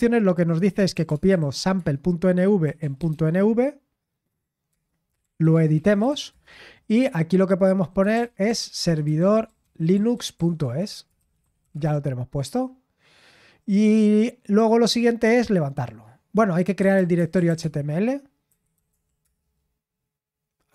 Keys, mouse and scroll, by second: 1.5-3.5 typing, 4.6-10.9 typing, 17.5-19.4 typing.